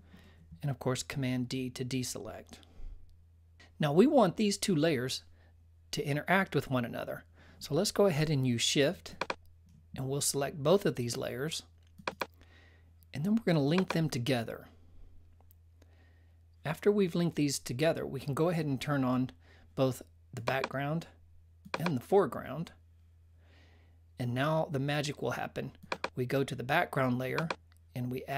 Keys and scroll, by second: 0.9 super+d.